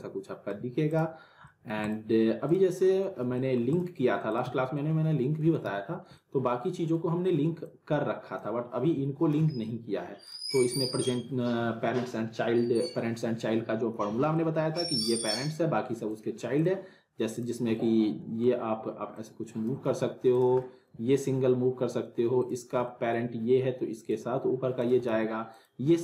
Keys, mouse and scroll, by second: 0.9 click, 1.4 alt+middle click, 1.8 alt+click, 2.5 click, 2.8 middle click, 3.2 scroll down 2, 3.3 alt+middle click, 3.7 click, 4.4 z, 4.7-5.7 alt+middle click, 5.6 z, 5.9 scroll down 1, 6.1-7.1 alt+middle drag, 7.6-8.6 drag, 9.4 ctrl+z, 10.2 click, 14.0 z, 14.3-14.9 alt+middle click, 14.7 scroll down 1, 16.1 click, 17.8-18.7 middle drag, 19.2-19.7 click, 19.9 ctrl+z, 20.3 click, 20.6 alt+middle click, 22.4 click, 22.8 alt+middle click, 24.1-25.0 click, 25.1 z, 25.5 click.